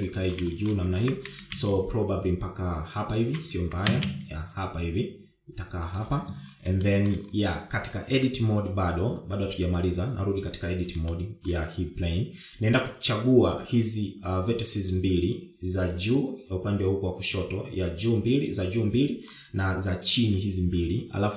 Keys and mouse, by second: 0.8 shift+middle click, 1.9 shift+g, 4.0 g, 7.2 shift+middle click, 8.4 Tab, 11.4 shift+middle click, 13.4-15.3 drag, 19.6 shift+click.